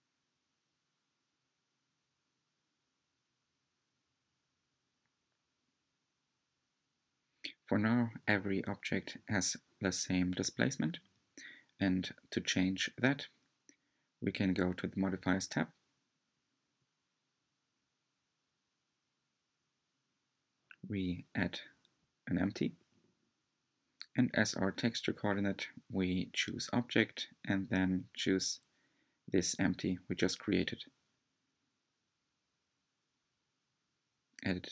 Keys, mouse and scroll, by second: 1.7 Tab, 2.2-2.6 scroll down 2, 2.6-4.8 middle drag, 4.8 Tab, 5.3-6.6 shift+middle drag, 6.6 Tab, 7.5 click, 9.1 click, 10.0-16.3 middle drag, 16.3 click, 19.6 shift+a, 25.0-30.3 drag, 31.2 click, 31.8-34.7 shift+drag.